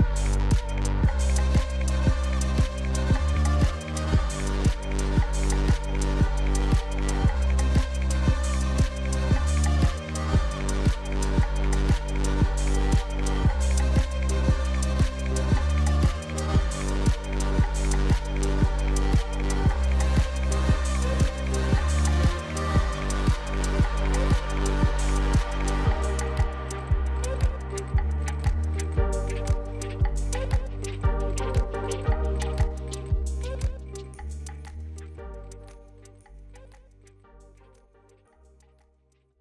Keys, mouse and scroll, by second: 1.2 click, 1.4 click, 2.5 space, 3.6-5.3 typing, 5.0 middle click, 5.7 middle click, 6.6 click, 7.5 click, 7.8-9.0 typing, 9.9 click, 10.1 click, 13.0 click, 13.4 ctrl+z, 17.5 click, 19.4 click, 24.4 click, 25.2 space, 26.4-28.5 typing, 26.6 middle click, 27.7 middle click, 28.7 middle click, 29.7 space, 29.9 middle click, 31.1 space, 31.4 space, 33.8 space, 34.2 space, 36.2 space, 36.5 space, 37.7-39.4 typing.